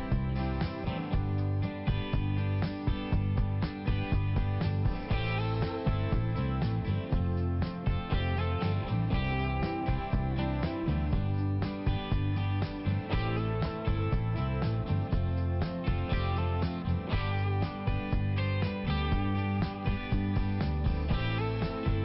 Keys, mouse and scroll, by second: 0.6 click, 1.0 click, 1.1 click, 1.3 click, 1.4 double click, 1.6 double click, 2.1 double click, 2.4 double click, 3.2 click, 3.6 click, 4.3 click, 5.8 [, 6.1 click, 6.6 click, 6.7 double click, 7.0 double click, 7.2 double click, 7.3 double click, 7.6 double click, 10.1 click, 11.8 click, 15.1-15.9 typing, 15.9 click, 16.4 click, 16.5 click, 16.7 click, 16.9 double click, 17.1 double click, 17.4 double click, 17.5 double click, 18.0 double click, 18.3 double click, 18.4 double click, 18.7 double click, 19.0 double click, 19.2 double click, 19.4 double click, 19.9 double click, 20.2 click, 20.9 click, 21.3 click.